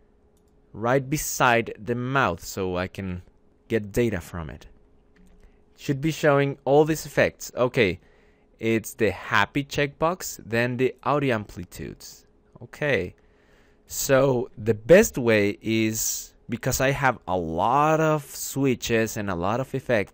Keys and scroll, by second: 5.0 alt+Tab, 14.6 `.